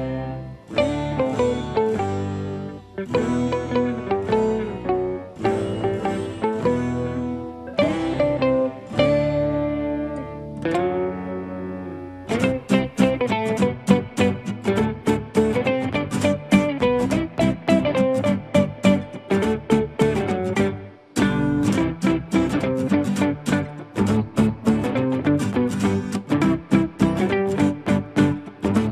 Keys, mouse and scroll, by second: 0.0-1.9 typing, 0.3 Tab, 0.4 click, 1.2 click, 3.4 click, 3.5 right click, 4.1 right click, 4.4 middle click, 4.5 click, 4.7 middle click, 4.9 scroll down 4, 5.0 click, 5.2 middle click, 5.3 scroll up 3, 5.5 ctrl+p, 5.8 click, 6.0 e, 6.1 r, 6.6 click, 6.7 middle click, 7.0-7.3 middle drag, 7.3 click, 7.4 middle click, 7.5 Tab, 7.7 click, 7.9 middle click, 8.0 Tab, 8.6 a, 9.2 click, 9.8 click, 10.2 middle click, 10.3 scroll up 2, 10.4 Tab, 10.4 middle click, 10.5 scroll down 1, 10.7 click, 10.8 click, 10.9 middle click, 11.3 ctrl+z, 11.4 middle click, 11.5 ctrl+click, 11.8 ctrl+z, 11.9 shift+middle click, 12.1 Tab, 12.2 click, 12.5 middle click, 12.8 shift+click, 12.8 middle click, 13.0 r, 13.4 middle click, 13.5 r, 13.7 middle click, 13.9 Tab, 14.1 click, 14.2 click, 14.4-14.7 middle drag, 14.6 scroll up 3, 14.7 Tab, 14.8 Tab, 15.0 middle click, 15.0 Tab, 15.2 click, 15.3 middle click, 15.5 r, 15.8 middle click, 16.0 click, 16.2 middle click, 16.3 Tab, 16.4 middle click, 16.6 click, 16.8 scroll up 4, 16.9 Tab, 16.9 middle click, 17.3 Tab, 17.3 click, 17.7 middle click, 18.0 click, 18.3 ctrl+s, 18.5 click, 18.7 middle click, 19.4 ctrl+s, 19.6 scroll down 3, 19.7 alt+h, 19.7 middle click, 19.8 click, 19.9 r, 20.2 middle click, 20.4 scroll up 6, 20.5 s, 20.7 g, 21.0 Tab, 21.1 click, 21.2 Tab, 21.3 Tab, 21.3 scroll down 4, 21.4 click, 21.7 ctrl+z, 22.1 Tab, 22.2 scroll up 3, 22.2 click, 22.4 shift+click, 22.6 click, 23.0 ctrl+middle click, 23.3-23.6 scroll up 4, 23.6 click, 24.5 middle click, 24.6 scroll down 3, 24.9 Tab, 25.0 middle click, 25.2 click, 25.7 ctrl+z, 26.2 Tab, 26.3 click, 26.6 ctrl+z, 26.9 Tab, 27.0 click, 27.2-28.4 ctrl+z, 27.5 Tab, 27.6 click, 27.8 Tab, 27.9 middle click, 28.0 Tab, 28.1 ctrl+z, 28.5 ctrl+s, 28.6 click, 28.8 middle click.